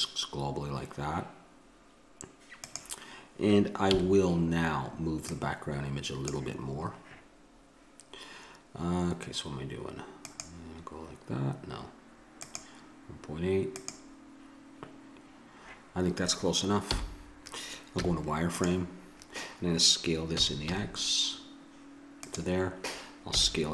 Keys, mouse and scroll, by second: 3.8 n, 5.2-6.6 drag, 6.6 middle click, 7.8-9.2 middle drag, 10.2-16.8 drag, 16.8 n, 18.0 z, 20.3 s, 23.3 s.